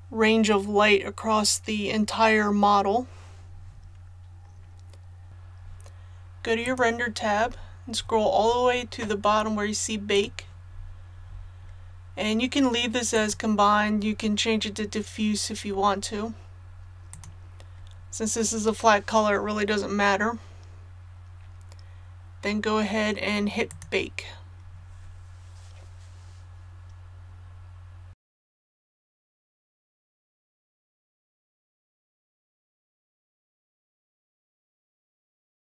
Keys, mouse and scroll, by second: 7.3-10.1 scroll down 1, 10.1 click, 10.6-11.2 scroll down 1, 11.3-11.9 scroll down 1, 13.1 click.